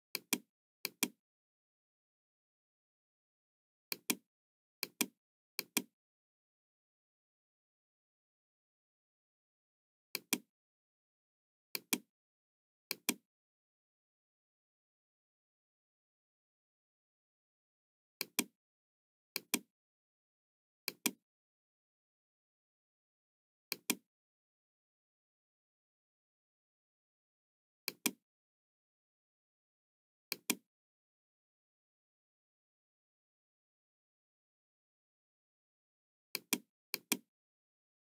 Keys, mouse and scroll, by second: 0.1 click, 0.8 click, 1.4-1.8 scroll down 1, 3.8 click, 4.7 click, 5.5 click, 10.1 click, 11.7 click, 12.8 click, 18.1 click, 19.2 click, 20.8 click, 22.1-22.4 scroll down 2, 23.6 click, 27.7 click, 30.2 click, 30.7 middle click, 30.9-31.4 scroll up 4, 31.6 scroll down 2, 36.3 click, 36.9 click, 37.8-38.1 scroll up 2.